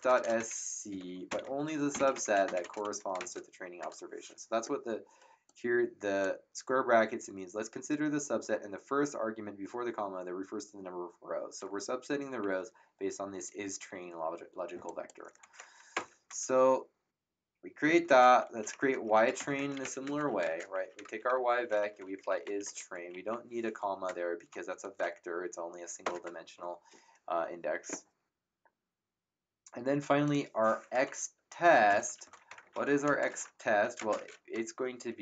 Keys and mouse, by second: 0.0-3.8 typing, 5.4 click, 14.8 click, 15.9 ctrl+KP_Enter, 17.9 Up, 18.5-23.1 typing, 26.5 ctrl+Return, 30.2 click, 31.8 Return, 32.0-33.9 typing.